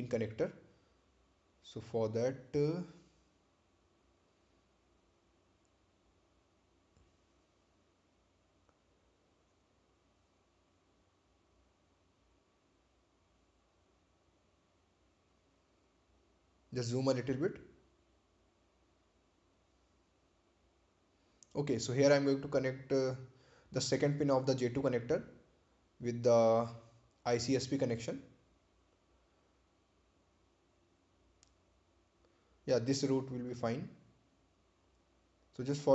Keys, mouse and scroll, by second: 0.8 click, 3.4 right click, 7.4 click, 11.9 right click, 16.3 click, 18.2-18.6 scroll up 1, 20.0 click, 22.8 click, 30.3 click, 34.2 click.